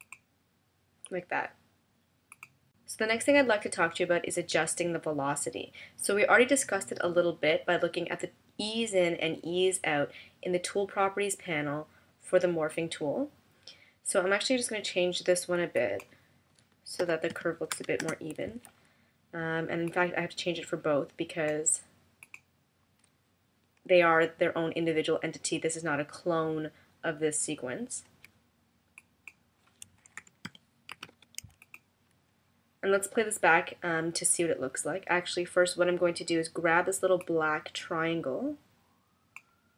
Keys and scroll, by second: 17.1 0, 17.7 5, 18.0 Return, 30.2 0, 30.9 5.